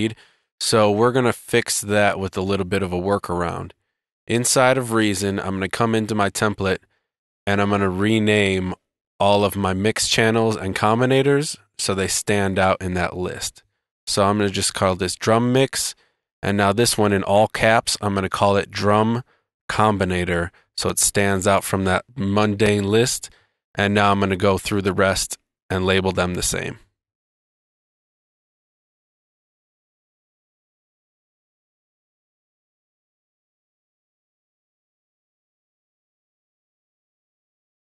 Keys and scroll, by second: 11.6 Right, 12.2 space, 18.3 shift+space, 18.9 shift+space, 25.0 Right, 25.6 shift+space, 25.9 Return, 26.3 BackSpace, 26.8 shift+space, 27.3 Return, 27.9 shift+space, 28.1 BackSpace, 28.2 shift+space, 28.9 Right, 29.1 Left, 29.5 shift+space, 30.1 Right, 30.4 space, 31.4 Right, 31.8 shift+space, 32.6 super+c, 32.8 Right, 33.2 super+v, 33.4 Down, 33.4 shift+Left, 33.8 Right, 34.2 Right, 34.2 shift+Up, 34.4 shift+space, 34.6 shift+space, 35.4 Return.